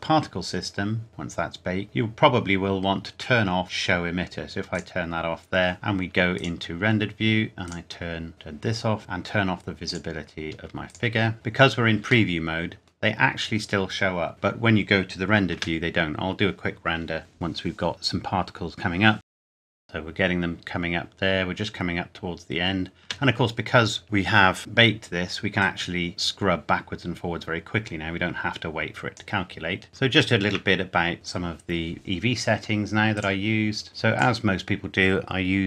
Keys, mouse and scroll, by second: 0.9 scroll down 1, 1.8 scroll up 1, 2.2-2.7 scroll down 1, 4.7 click, 4.8-6.1 scroll down 1, 6.3 click, 12.3 middle click, 15.5 space, 19.2 shift+middle click, 19.3 click, 19.4 scroll down 1, 19.5 middle click, 19.7-20.5 scroll up 1, 20.5 scroll down 1, 23.0 space, 25.6 click, 29.6 scroll up 1, 30.0 shift+middle click, 31.1 click, 33.7 scroll up 1, 33.9 click, 34.1 click.